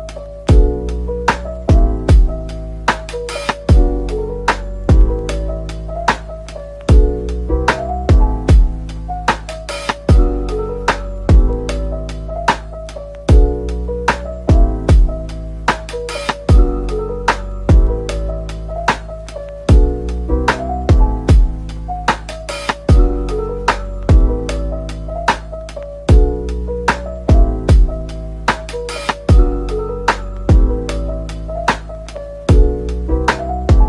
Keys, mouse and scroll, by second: 1.4 shift+click, 3.3 scroll down 1, 4.4 scroll down 1, 5.2 scroll down 1, 9.3-9.7 scroll down 2, 11.3 scroll up 1, 13.2 scroll down 1, 14.5 typing, 17.6 typing, 18.9 typing, 24.1-24.5 scroll down 1, 24.5-24.8 scroll up 1, 26.5-27.3 typing, 29.9 typing, 30.5-30.8 scroll down 1, 31.5 typing, 32.1 shift+click, 32.6 middle click, 33.7 middle click.